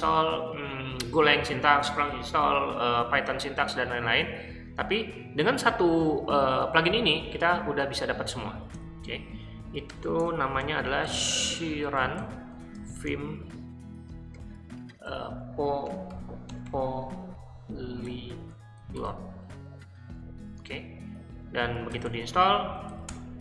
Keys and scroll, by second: 8.7 ;, 9.9-20.1 typing, 21.7-23.3 typing.